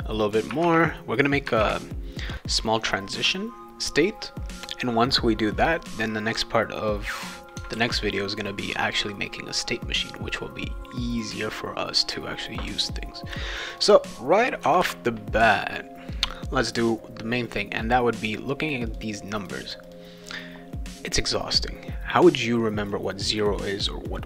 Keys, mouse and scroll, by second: 0.3 click, 1.3 click, 2.5 click, 7.8 ctrl+s, 13.8 click, 14.6 /, 14.8 /, 18.4 click, 18.9 click, 19.4 click, 19.8 click, 20.3 click, 22.9 click, 24.0 click.